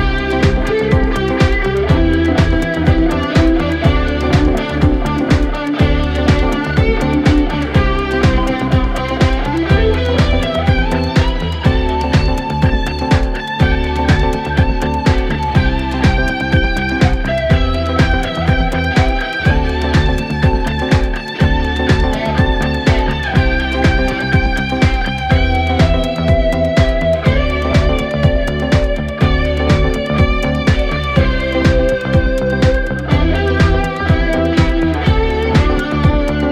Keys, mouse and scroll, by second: 0.4-2.6 drag, 10.3 space, 10.4-11.0 click, 10.7 space, 11.6 click, 15.5-16.8 drag, 22.7-24.3 drag, 25.7 right click, 26.7 click, 29.2-30.5 drag, 30.5-31.5 click, 31.7-32.1 alt+scroll down 1, 32.4 click, 34.7-36.5 drag.